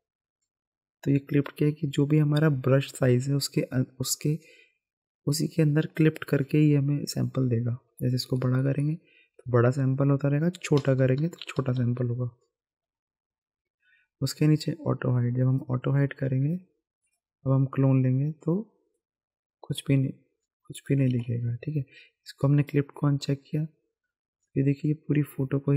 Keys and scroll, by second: 7.2-9.5 typing, 10.7-12.9 typing, 21.1 ctrl+z.